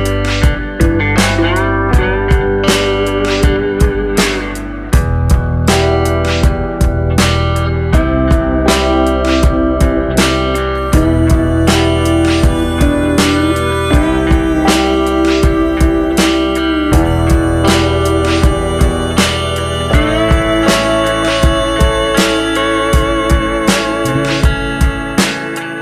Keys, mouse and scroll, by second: 0.7 click, 3.9 click, 4.5 click, 5.0 click, 5.4 click, 6.1 click, 7.1 click, 8.3 click, 9.3 click, 10.9 click, 12.0 click, 12.4 click, 12.9 click, 14.8 scroll down 4, 15.3 middle click, 16.6 click, 17.2 click, 18.9 middle click, 19.8 click, 21.4 click, 22.4 click, 23.3 click, 24.0 click.